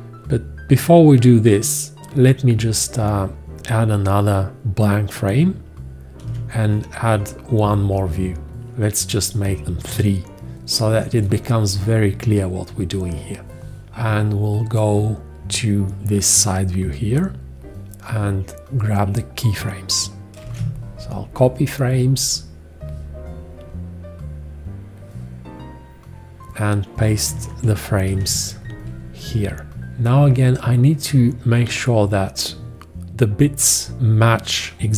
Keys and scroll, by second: 6.2 alt+z, 9.9 shift+z, 11.1 shift+z, 20.4 ctrl+alt+c, 28.1 ctrl+alt+v.